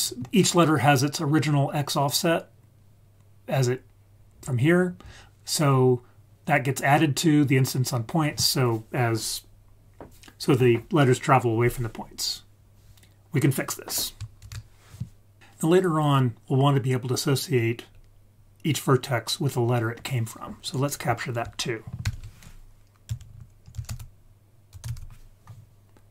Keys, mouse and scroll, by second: 14.4 ctrl+s, 20.6 click, 22.0 shift+a.